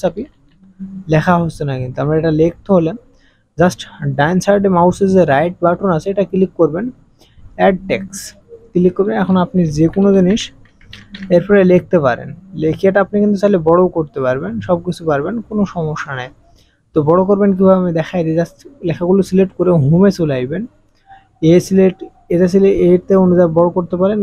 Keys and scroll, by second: 0.1 KP_5, 0.2 KP_2, 9.3-10.9 typing, 10.9 Return.